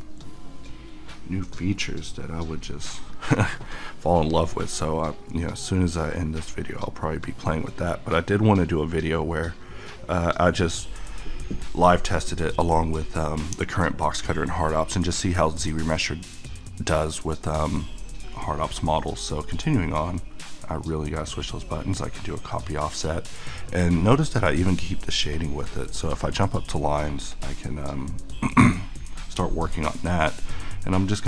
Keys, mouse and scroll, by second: 11.5 middle click, 12.7 middle click, 18.3 `, 19.4 click, 19.9 q, 21.4 click, 21.9-25.4 middle drag, 25.4 click.